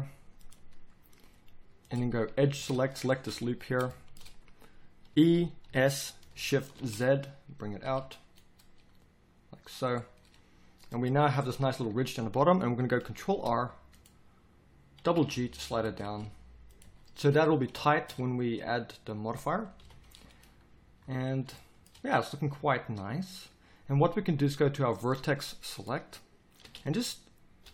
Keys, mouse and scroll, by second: 2.2 a, 2.5 a, 5.1 e, 13.3 ctrl+r, 19.8 KP_1, 20.9 z, 22.6 a, 26.6 b, 27.6 b.